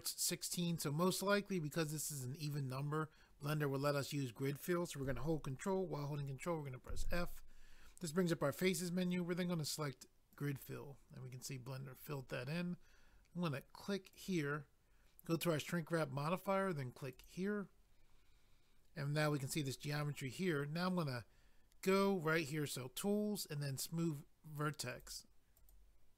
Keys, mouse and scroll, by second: 6.9 ctrl+f, 10.3 click, 10.4 click, 14.1 click, 14.3 click, 17.1 click, 17.2 click, 24.9 click, 25.0 click, 25.6 click, 25.7 click.